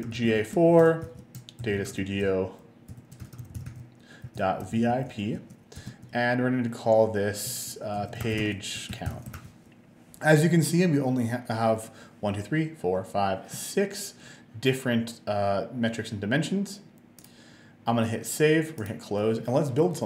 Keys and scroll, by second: 0.4-4.3 typing, 5.4 space, 5.8 -, 5.9 space, 8.0-10.0 typing.